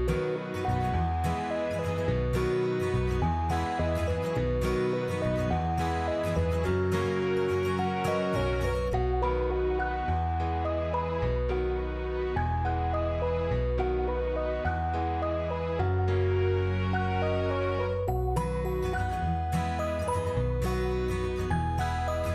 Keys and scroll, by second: 18.5-19.4 typing, 21.8 8.